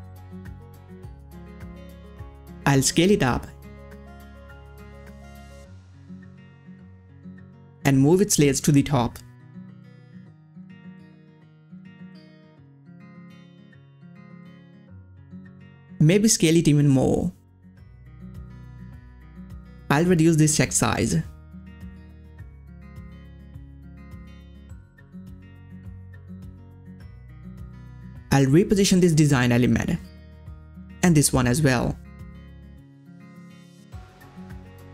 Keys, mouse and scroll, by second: 4.7-11.5 drag, 11.5-12.5 scroll up 1, 12.5 right click, 12.9 right click, 14.0 click, 16.0 click, 16.0 click, 17.9 click, 26.4-27.0 scroll down 1, 27.0-30.6 drag, 31.6-34.1 drag.